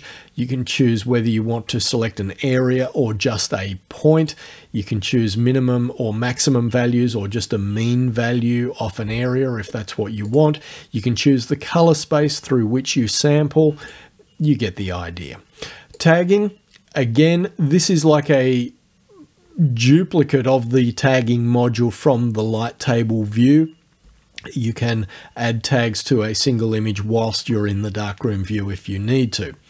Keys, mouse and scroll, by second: 4.2 click, 10.3 click, 13.9 click, 16.0 click.